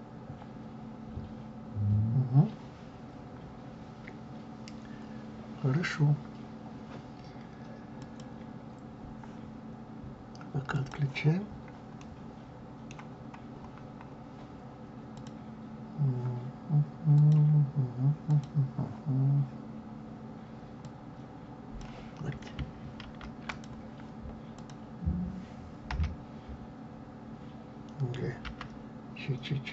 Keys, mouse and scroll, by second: 2.0 scroll down 2, 7.9 click, 10.7 click, 11.4-11.9 scroll down 1, 11.9-13.1 middle drag, 13.1-13.4 scroll up 1, 15.0 scroll up 8, 15.1 click, 17.1-20.8 drag, 23.0 ctrl+z, 23.4 click, 24.5 click, 25.8 l, 28.4 g.